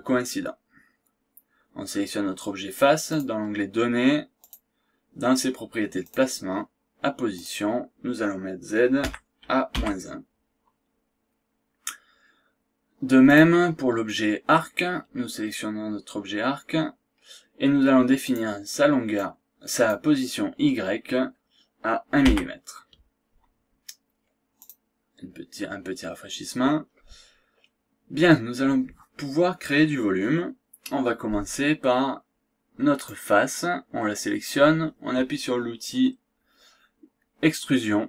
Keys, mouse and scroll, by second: 3.1 click, 4.4 click, 6.0 click, 7.3 click, 9.0 KP_Subtract, 9.7 KP_1, 13.3 click, 18.2 click, 19.1 click, 22.2 KP_1, 24.5 click, 27.5 scroll down 1, 27.7-28.0 scroll up 1, 33.1 click.